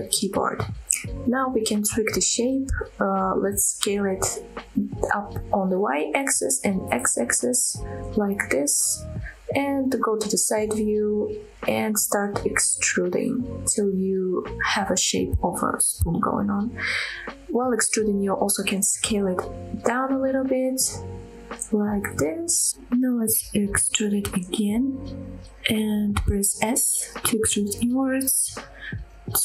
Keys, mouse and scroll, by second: 0.3 click, 1.1 scroll down 2, 1.3-2.0 scroll up 1, 2.2 s, 3.1 y, 6.5 click, 6.8 s, 7.1 x, 9.2 click, 9.5-10.6 scroll down 1, 10.6 KP_3, 11.2-11.7 scroll up 3, 11.8 shift+middle click, 12.3 scroll up 2, 12.7 shift+middle click, 13.5 e, 15.0 z, 17.3 click, 17.7 s, 19.0 click, 19.5 e, 20.1 z, 22.1 click, 22.4 s, 25.1 click, 26.0 e, 26.8 s, 28.4 click, 28.9 middle click.